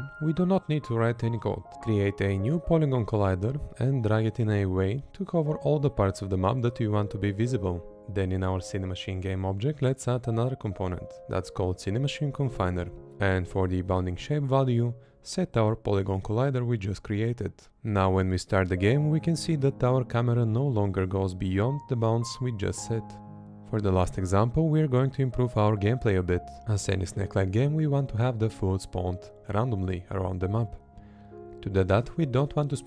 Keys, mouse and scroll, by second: 0.2 Right, 1.0 Right, 2.4 Left, 4.7 Left, 8.0 Left, 9.5 Left, 10.2 Left, 11.8 Right, 12.4 Right, 13.3 Left, 14.9 Left, 16.1 Left, 17.4 Right, 20.0 Left, 23.0 Left, 23.9 Left, 24.7 Left, 26.0 Right, 26.1 Left, 27.4 Left, 28.9 Right, 30.1 Left, 31.1 space, 31.8 Right.